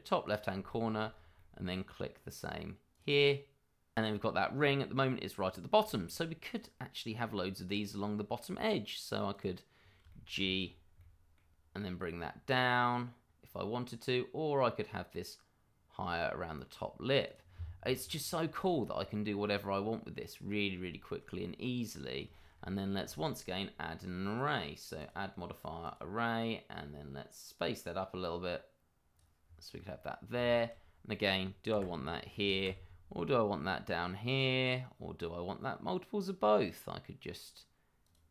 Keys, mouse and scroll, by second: 0.2 click, 0.7 shift+middle click, 1.1 scroll up 1, 1.3 middle click, 2.9 click, 4.2-4.6 scroll up 1, 5.0-5.8 scroll down 1, 5.8 shift+middle click, 6.5 click, 7.1 scroll up 1, 7.6 click, 8.3 middle click, 9.3 click, 9.7 scroll down 1, 10.0 shift+middle click, 10.7 scroll up 1, 10.9 middle click, 11.5 x, 17.2 click, 17.8 middle click, 18.6 shift+middle click, 18.6 middle click, 18.8 shift+middle click, 18.9-19.7 scroll up 1, 19.7-20.2 scroll down 1, 20.2 middle click, 21.1 shift+middle click, 21.5 middle click, 22.3 shift+middle click, 22.3 middle click, 22.5-23.1 scroll up 1, 23.1 shift+middle click, 23.2 middle click, 24.2-24.9 scroll up 1, 24.9 click, 26.0 click, 28.2 click, 29.4-29.7 scroll down 1, 29.7 middle click, 30.6 shift+middle click, 31.7 g, 32.6 x, 38.1 click.